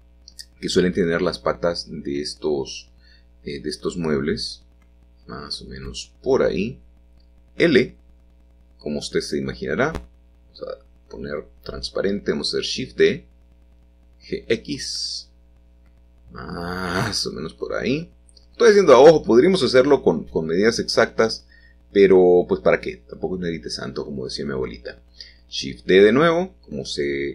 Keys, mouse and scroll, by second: 0.2 middle click, 0.9-1.9 drag, 1.9 g, 2.4 z, 3.4-5.2 drag, 5.2 middle click, 6.9 l, 8.6 7, 10.3-11.5 drag, 12.2 shift+d, 12.4 Escape, 12.9 g, 13.3 x, 17.4-18.5 drag, 20.3 middle click, 24.8 shift+d, 25.0 Escape, 25.7 g, 26.5 y.